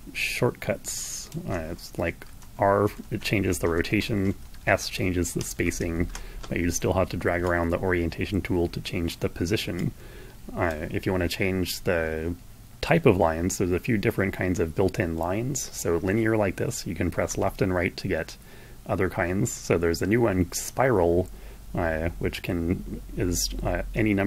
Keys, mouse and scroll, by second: 2.1 r, 2.7 r, 4.3 shift+s, 5.4 shift+s, 7.2-9.2 drag, 9.7-10.7 drag, 17.0 Right, 24.1-24.2 drag.